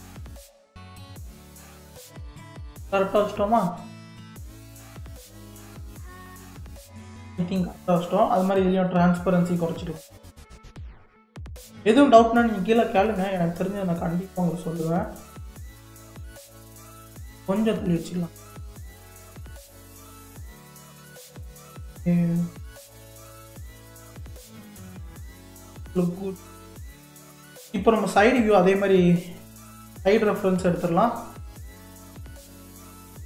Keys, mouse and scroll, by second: 8.5 click, 9.5-12.6 drag, 13.0 click, 13.4-16.5 middle drag, 17.1 KP_7, 18.7 g, 20.2 click, 20.5 g, 25.9 click, 26.3-28.8 middle drag, 28.8-29.4 scroll down 1, 29.5 shift+a.